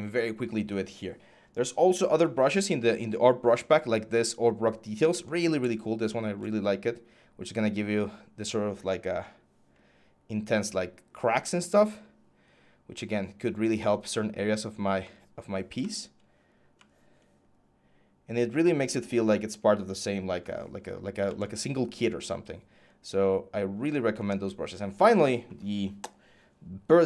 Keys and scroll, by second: 6.0 scroll, 21.1 ctrl+z.